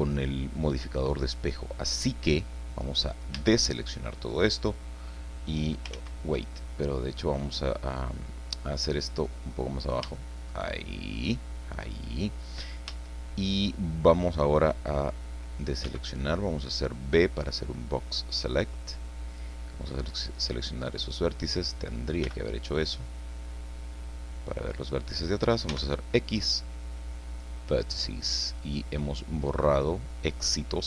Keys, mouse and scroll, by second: 3.3 a, 5.9 ctrl+z, 9.2 click, 10.2-11.3 shift+middle drag, 12.9 a, 15.8 b, 17.4-19.6 drag, 20.7 click, 22.2 b, 23.1-24.8 drag, 25.7 x, 27.3 click, 28.3-29.4 middle drag, 29.4-30.8 drag.